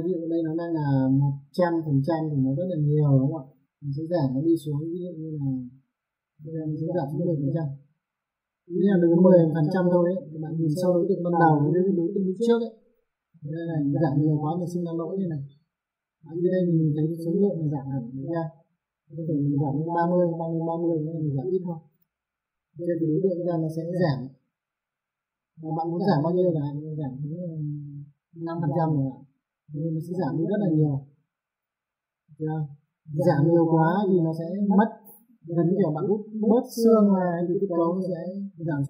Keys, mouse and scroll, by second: 4.7 click, 8.2 click, 9.7 middle click, 11.3 F3, 12.4 F4, 12.9 middle click, 14.2 click, 18.3 click, 19.8 KP_3, 20.0 KP_0, 20.7 click, 22.3 middle click, 23.3 F3, 23.7 F4, 24.9 click, 26.0 middle click, 26.8 click, 28.5 KP_5, 28.9 click, 34.0 F3, 34.6 click, 38.7 click, 38.8 F3.